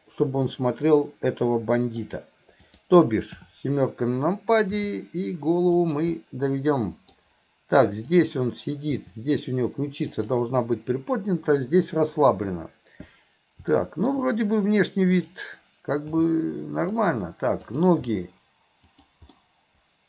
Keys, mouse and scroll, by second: 0.5-2.0 middle drag, 2.0 scroll down 1, 2.6 click, 4.8 r, 6.2-7.2 middle drag, 8.1 click, 8.9 r, 13.8-14.1 middle drag, 15.2 click, 16.1 g, 17.6 click, 18.1 g, 19.3-20.0 middle drag.